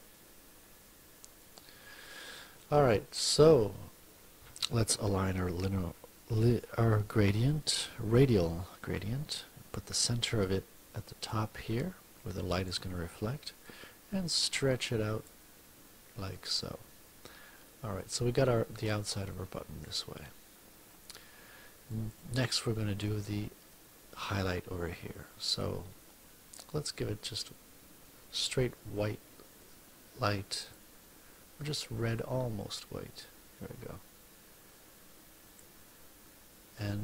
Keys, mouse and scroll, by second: 1.3 click, 6.3 F2, 7.4-10.1 drag, 11.2-12.8 drag, 13.5-15.3 drag, 16.3 click, 21.8 click, 30.7-35.7 drag.